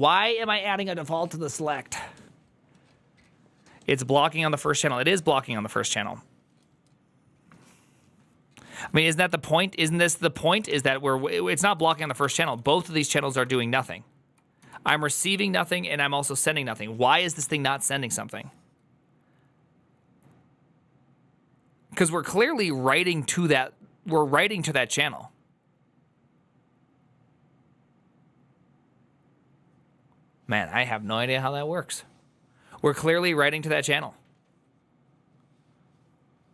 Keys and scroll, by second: 10.3 alt+{, 10.3 ctrl+a, 10.5-14.9 typing, 17.1 ctrl+c, 17.2 shift+v, 19.3-20.1 typing.